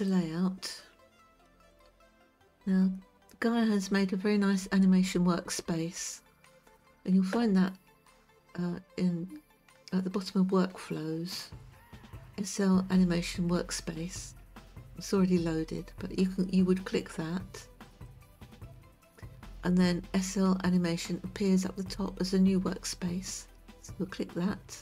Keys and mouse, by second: 0.0 click, 17.9 click.